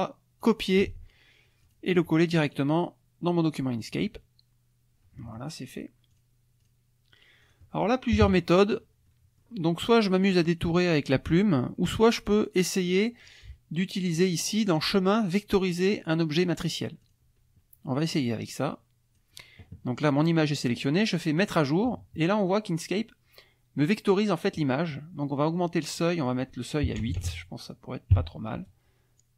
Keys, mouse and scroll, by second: 0.4 click, 1.0 alt+Tab, 1.6 alt+click, 2.5 alt+right click, 3.8 click, 6.1 click, 6.6 click, 7.4 click, 8.2 KP_Subtract, 9.1 click, 12.3 click, 12.6 click, 14.2 click, 17.0 click, 18.1-19.3 drag, 21.4 click, 26.0 click, 27.0 BackSpace, 28.1 KP_8.